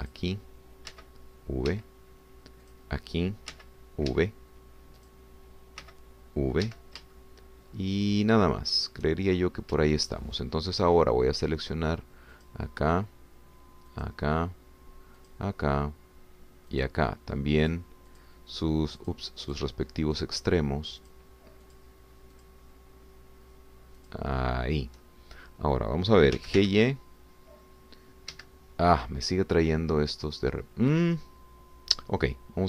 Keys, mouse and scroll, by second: 0.1-1.2 middle drag, 1.2 click, 1.9 v, 2.7 Escape, 3.6 click, 4.5 v, 5.1 Escape, 6.1 click, 6.8 v, 7.7 Escape, 8.2-10.3 shift+drag, 10.3 shift+scroll down 2, 13.3 shift+click, 15.1 shift+click, 16.4 shift+click, 17.9 shift+click, 18.8 shift+click, 19.1 shift+click, 20.0 shift+click, 20.5 shift+click, 21.2 shift+click, 22.1 shift+click, 22.6 shift+click, 23.4 shift+click, 25.0 shift+click, 27.3 g, 27.5 y, 29.3 Escape.